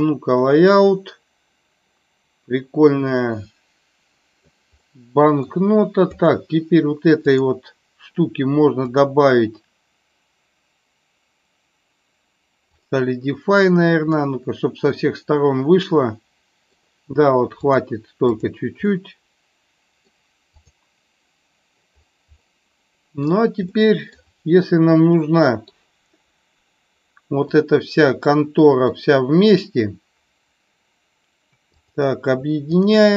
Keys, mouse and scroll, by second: 0.7-4.5 middle drag, 4.9 middle click, 8.9-12.9 drag, 14.2-16.7 middle drag, 17.7 click, 18.9-20.1 middle drag, 20.5 click, 22.4-23.4 middle drag, 23.7 middle click, 25.1 middle click, 27.5-28.9 middle drag, 32.9 shift+click.